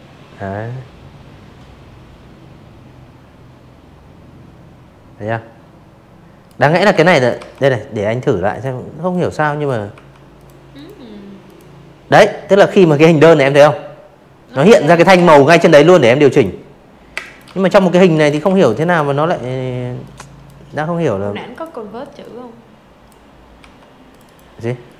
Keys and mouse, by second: 3.4-4.8 typing, 4.0 click, 4.4 click, 5.4 click, 6.0 click, 6.8 v, 7.3 click, 7.6 click, 8.4 click, 11.4 z, 11.6 click, 12.0 v, 13.2 click, 14.1 space, 14.2 click, 14.4 v, 14.6 click, 15.1 z, 15.2 click, 15.4 v, 15.6 click, 15.8 click, 16.9 click, 18.4 click, 19.1 click, 20.5 v, 21.0 click, 21.1 click, 21.8 click, 22.2 right click, 23.0 click, 23.4 click.